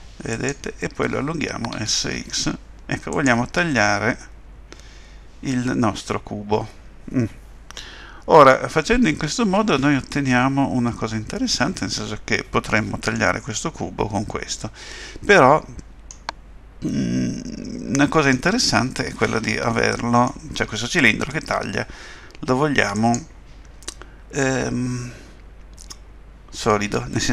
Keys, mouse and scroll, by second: 1.8 s, 3.7 middle click, 14.6 middle click, 16.9 middle click, 19.7 middle click, 22.9 click.